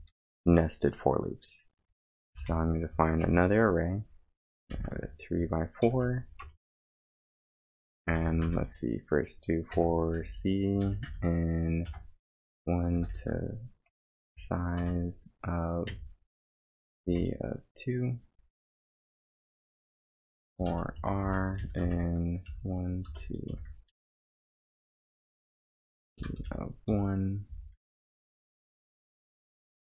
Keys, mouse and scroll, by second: 0.1 =, 1.7-3.2 typing, 4.4 3, 4.7 space, 4.9 4, 5.8 shift+), 6.4 Return, 7.2 Return, 7.8-14.8 typing, 15.9 z, 16.9 space, 17.2 2, 19.3-25.0 typing, 26.2-28.7 typing.